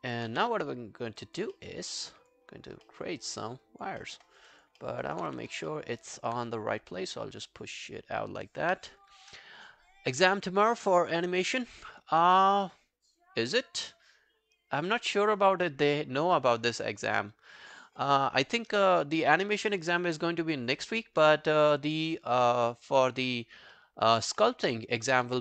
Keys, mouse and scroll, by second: 0.0 alt+click, 0.3 q, 1.0 scroll down 3, 1.2 alt+click, 1.6 alt+middle click, 2.0 alt+scroll down 1, 2.1 alt+click, 2.5-2.9 alt+scroll up 4, 2.9 alt+middle click, 3.7 alt+click, 4.0 alt+middle click, 4.3 alt+right click, 4.5 alt+click, 4.8 alt+middle click, 5.0 alt+right click, 5.3 w, 5.7 alt+middle click, 6.0 alt+click, 8.7 q, 22.0-22.5 scroll down 6, 22.5 alt+click, 22.9 alt+middle click, 23.1 alt+right click, 23.4 alt+click, 23.8 alt+middle click, 24.2 alt+scroll up 3, 24.4 alt+middle click, 25.0 alt+click, 25.3 w.